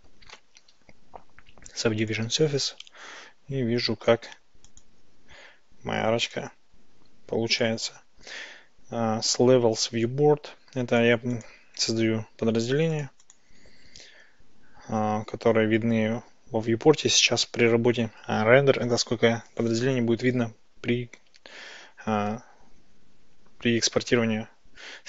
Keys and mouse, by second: 4.7 click, 6.4 click, 7.6 click, 11.5 click, 13.0 click, 13.3 click.